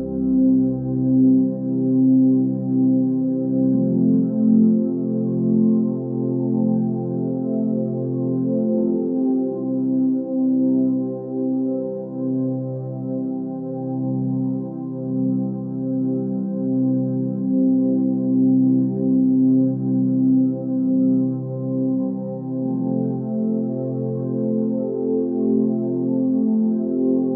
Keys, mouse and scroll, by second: 5.9 ctrl+space.